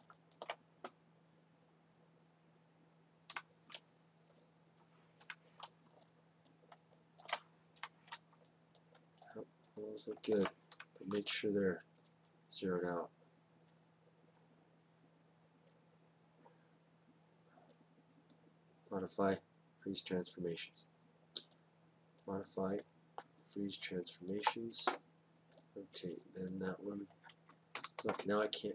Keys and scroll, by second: 4.3 F8, 8.7 F8, 11.7 F8, 14.7 space, 17.4 space, 21.0 space, 23.3 space, 25.2 space.